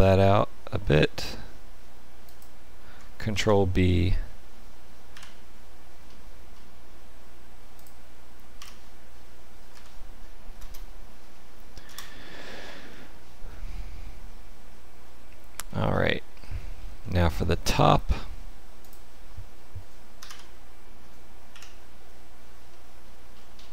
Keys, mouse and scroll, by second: 3.2 ctrl+b, 8.5 1, 9.6 a, 10.5 space, 12.8 middle click, 15.7-16.2 scroll down 4, 16.3 shift+middle click, 16.9 middle click, 18.7 click, 20.1 Delete, 21.4 KP_1, 22.6 shift+middle click, 23.5 scroll up 2.